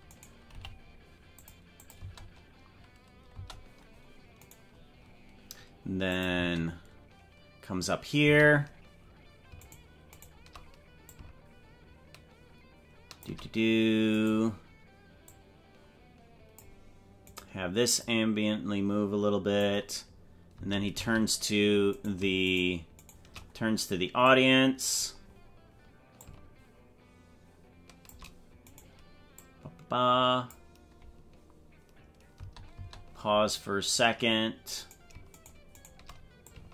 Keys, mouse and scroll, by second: 0.1 right click, 0.5 g, 1.8 click, 2.0 space, 3.5 space, 4.5 right click, 6.1 click, 6.4 space, 8.3 space, 9.7 shift+right click, 11.1-13.3 shift+drag, 14.2 right click, 15.3-16.7 drag, 17.4 right click, 18.0-19.7 drag, 20.5 space, 21.1 space, 22.0 right click, 23.1 shift+right click, 24.3 click, 26.2-28.3 shift+drag, 28.8 right click, 29.4-30.7 drag, 32.4 space, 32.9 space, 34.9 right click, 35.4 shift+right click, 36.4-36.7 shift+drag.